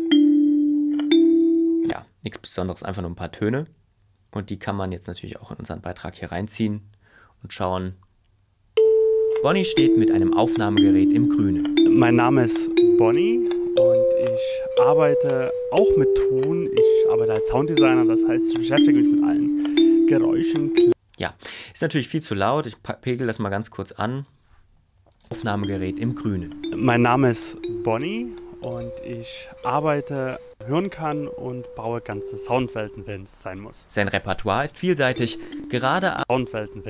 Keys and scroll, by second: 7.0 shift+Left, 8.7 space, 20.9 space.